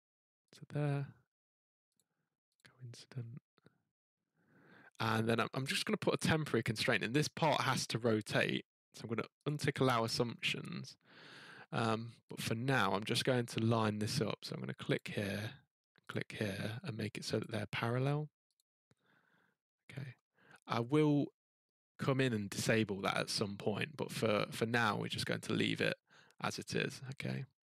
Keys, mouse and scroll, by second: 0.5 click, 1.9 click, 2.5 click, 4.2 scroll, 5.3-6.2 scroll down 4, 6.9 middle click, 7.6 scroll, 9.4 click, 10.0-10.4 scroll, 12.3 click, 14.0 scroll, 14.9 click, 17.4 click, 18.5 click, 21.1 middle click, 22.5 scroll up 3, 22.7 scroll down 2, 24.9 middle click.